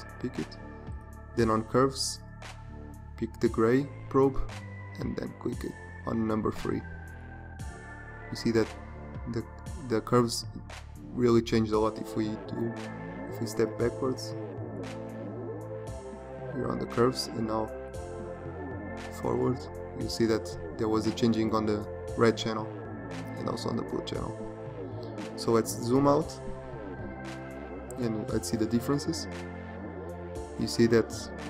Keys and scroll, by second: 12.9 ctrl+alt+z, 17.8 ctrl+shift+z, 25.0 ctrl+0.